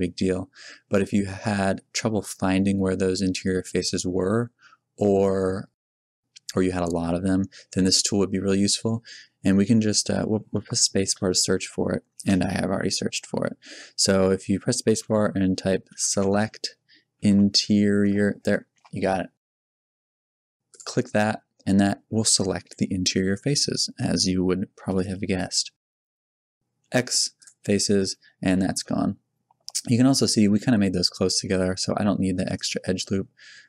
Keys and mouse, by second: 4.4 x, 4.4 z, 8.6 a, 9.1 a, 11.1 space, 21.7-25.4 middle drag, 26.8 x, 28.0 Tab, 28.5 Tab.